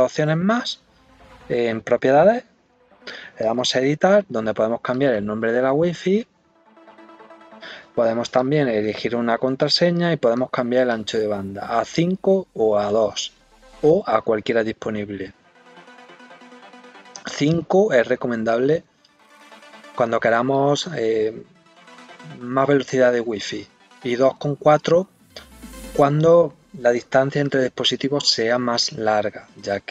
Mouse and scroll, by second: 3.4 click, 4.9 click, 8.3 click, 10.3 click, 10.9 click.